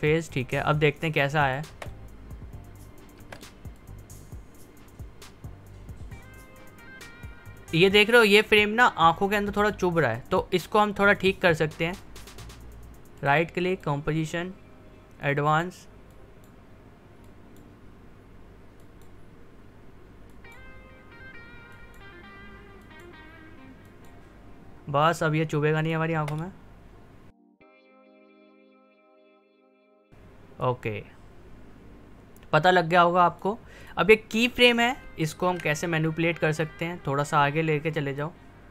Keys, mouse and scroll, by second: 0.9 click, 1.7 space, 3.7-11.9 drag, 13.1 right click, 13.7-18.8 drag, 28.6 click, 28.9 space, 30.6-38.7 drag.